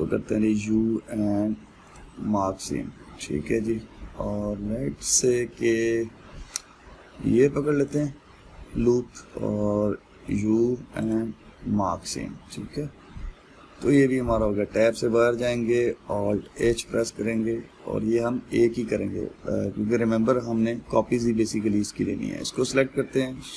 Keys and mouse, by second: 3.8-8.6 middle drag, 8.6 alt+click, 9.0-11.7 middle drag, 11.7 u, 12.9-14.7 middle drag, 14.7 Tab, 16.9 alt+h, 18.0-23.1 ctrl+middle drag, 23.1 click.